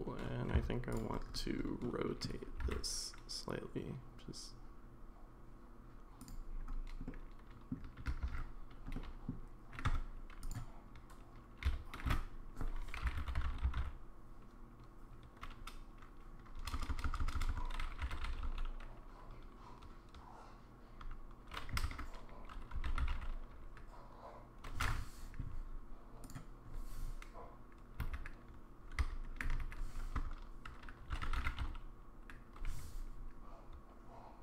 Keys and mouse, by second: 0.6 Tab, 1.8-2.2 middle drag, 2.6 r, 7.1 middle click, 8.2 ctrl+z, 8.9-9.3 middle drag, 9.9 Tab, 11.7 a, 12.1 space, 16.9 BackSpace, 17.0 BackSpace, 17.5 BackSpace, 28.0 space, 29.5 space.